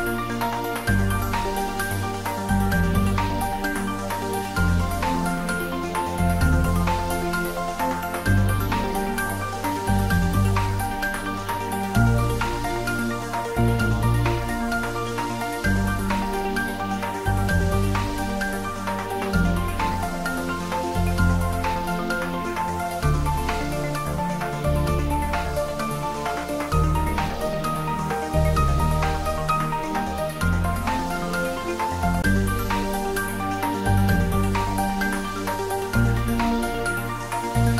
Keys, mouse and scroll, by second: 0.9 Return, 2.0 scroll down 2, 2.3 middle click, 2.7 shift+z, 3.1-3.7 middle click, 3.6 Tab, 4.4-6.7 middle drag, 7.2-7.8 scroll down 1, 7.8-8.4 middle click, 9.0 Tab, 9.9-10.5 middle click, 10.8-12.5 scroll up 1, 12.5 click, 15.3 scroll down 1, 15.8-16.4 middle click, 17.1 click, 18.7 2, 18.9 click, 22.2-23.6 shift+scroll down 1, 25.5-25.9 scroll down 1, 27.9 e, 28.2 s, 29.6 click, 29.9 shift+z, 31.0 ctrl+z, 31.8 scroll down 2, 31.8-33.1 middle drag, 34.6-36.1 scroll up 2, 37.4 alt+shift+click.